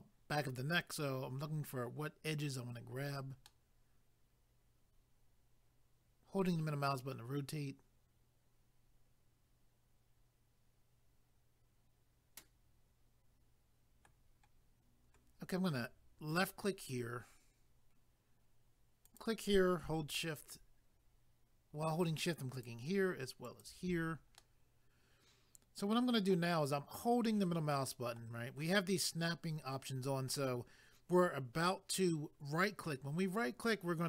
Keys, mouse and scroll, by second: 3.5 middle click, 16.3 click, 19.0 click, 22.5 shift+click, 23.4 shift+click, 24.4 middle click.